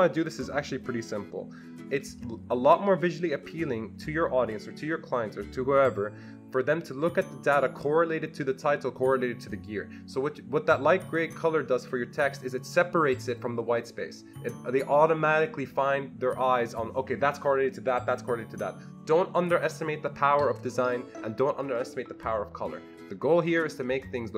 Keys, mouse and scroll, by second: 11.1 click.